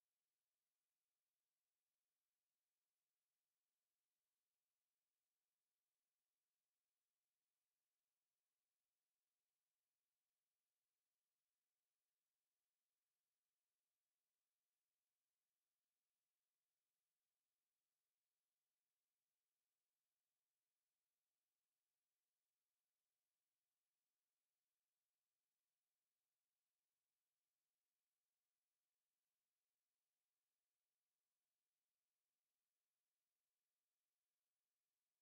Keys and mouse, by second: 0.9 KP_7, 3.1 KP_1, 7.4 Tab, 9.0 a, 10.0 b, 12.7-18.5 drag, 18.8 middle click, 20.7 z, 25.4-33.5 middle drag, 33.9 KP_1, 35.0 KP_3.